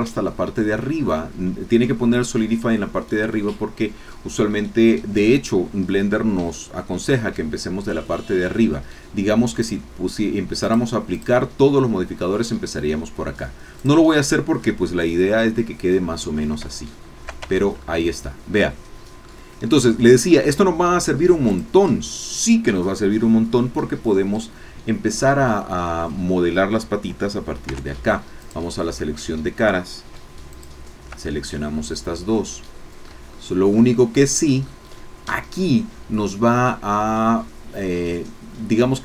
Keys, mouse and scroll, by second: 9.6-11.4 drag, 13.8 click, 14.5-14.9 scroll down 2, 16.1 scroll down 2, 16.8 shift+middle click, 17.6 shift+Tab, 17.8 shift+middle click, 18.6 click, 19.6 shift+click, 21.5 click, 27.6 3, 28.4 click, 30.7 shift+click, 31.7-33.1 drag, 33.1 shift+middle click, 33.4 shift+middle click, 34.0 shift+click.